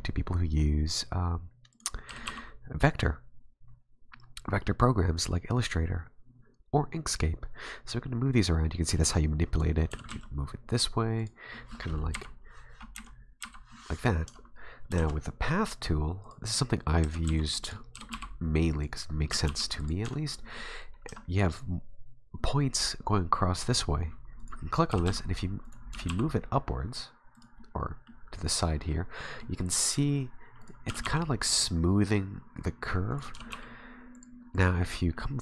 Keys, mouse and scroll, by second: 2.1 g, 9.5 right click, 9.9 g, 11.5 middle click, 12.1 KP_7, 12.9 KP_1, 13.4 KP_7, 14.3 Tab, 15.0 shift+a, 17.0 g, 17.9 g, 19.3 g, 20.0 Tab, 21.1 a, 24.4 right click, 24.9 g, 25.9 g, 27.6 middle click, 27.6-28.2 scroll up 1, 28.9 middle click, 30.6 right click, 30.9 g, 33.1 right click, 33.3 g, 33.6 r, 34.5 right click, 35.1 middle click.